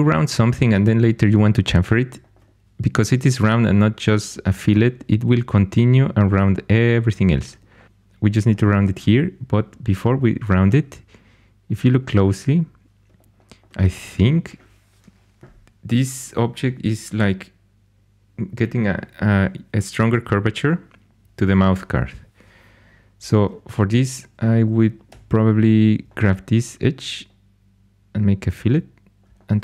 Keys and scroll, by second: 25.0 2.